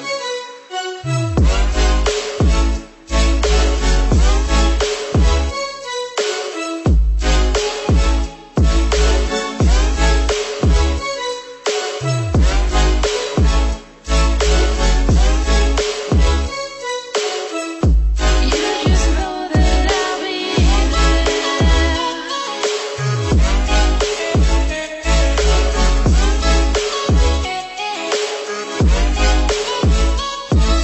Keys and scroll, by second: 12.2 Down, 13.2 Left, 14.5 Down, 15.4 Right.